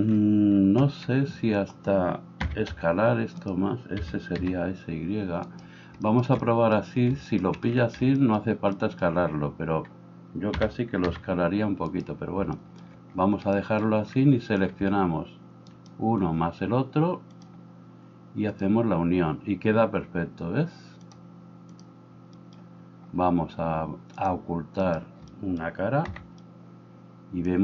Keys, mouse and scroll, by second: 4.4 s, 15.7 shift+middle click, 15.7 shift+right click, 17.5-18.6 middle drag, 18.6-27.6 drag, 24.9 middle click, 24.9 right click.